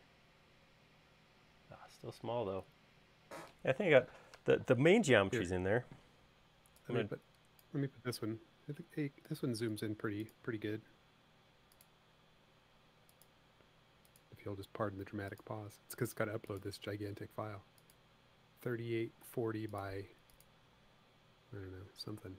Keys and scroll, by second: 19.7 l.